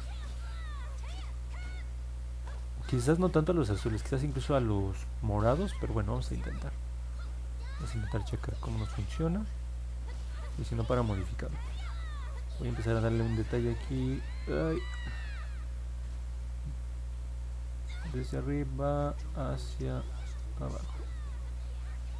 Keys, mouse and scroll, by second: 13.4 click, 14.7 ctrl+z, 15.5-22.1 drag.